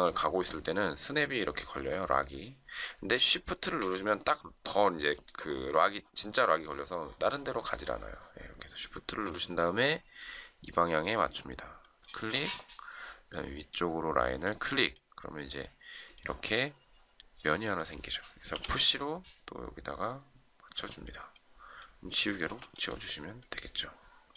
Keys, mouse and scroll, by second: 11.7 shift+click, 16.1 shift+middle click, 18.4 p, 22.4 e.